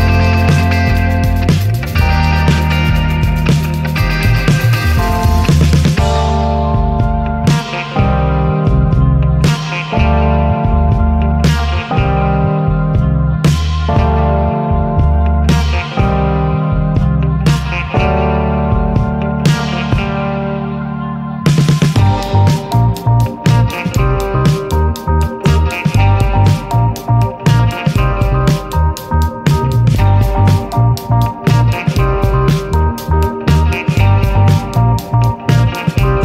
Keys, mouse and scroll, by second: 0.0 click, 2.0 click, 3.9 click, 12.0 ctrl+z, 14.3-15.6 drag, 15.6 ctrl+z, 16.4 click, 17.5 scroll up 2, 18.0 scroll down 2, 21.0 F1, 21.9 KP_Add, 23.2 space, 24.6-25.6 drag, 25.7 click, 26.4 click, 27.6 click, 29.3 ctrl+z, 30.9 F1.